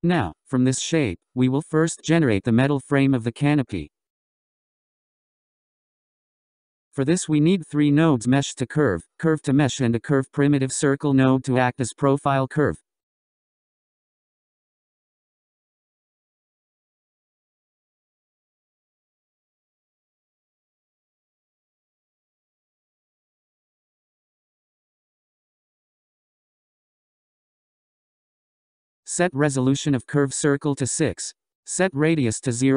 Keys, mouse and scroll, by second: 2.0 scroll up 2, 2.7-3.5 scroll down 7, 3.9-5.0 scroll up 7, 6.6 click, 7.0 shift+a, 12.2 shift+a, 17.7 shift+a, 22.0-22.5 scroll down 4, 22.5 scroll up 4, 24.2-25.3 drag, 26.3-27.9 drag, 30.5-32.7 drag.